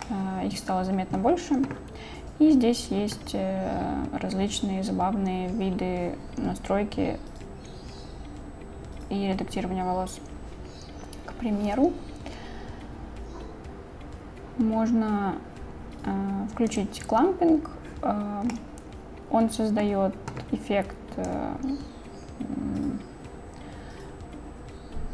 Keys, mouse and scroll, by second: 0.1-1.2 middle drag, 16.7 click, 18.6-19.9 middle drag, 21.3-25.1 drag.